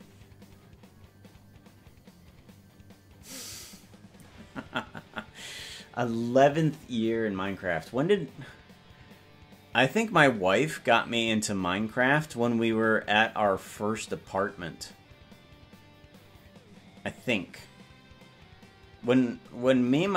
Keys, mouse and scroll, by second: 0.7 ctrl+s.